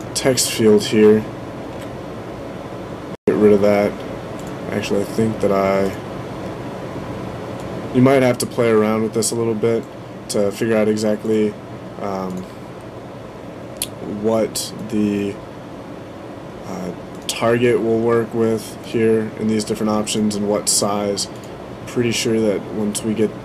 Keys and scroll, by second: 1.5 Delete.